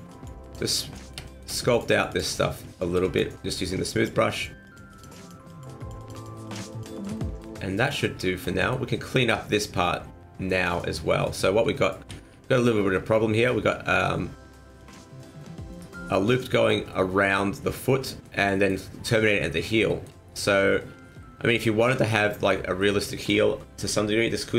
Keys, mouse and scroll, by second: 0.1 click, 0.4 click, 0.6 click, 1.0 middle click, 1.2 shift+middle click, 1.6 click, 1.9 click, 2.1 click, 2.3 middle click, 2.8 click, 3.0 click, 3.3 scroll down 2, 3.4 middle click, 3.9 click, 4.3 click, 4.6 click, 4.9 click, 5.2 click, 5.5 click, 5.8 click, 6.0 click, 6.2 click, 6.4 click, 6.7 click, 7.0 click, 7.2 middle click, 8.2 shift+middle click, 8.4 middle click, 9.0-9.7 scroll up 1, 9.7 middle click, 13.0 Tab, 14.8 click, 15.7 alt+right click, 16.3 middle click, 16.8 scroll down 1, 16.9 middle click, 17.8 middle click, 18.5 middle click, 19.2 middle click, 20.0 shift+middle click, 20.5 shift+middle click, 20.5 scroll up 1, 20.8 shift+scroll down 1, 21.1 middle click, 22.8 middle click, 22.9 shift+middle click.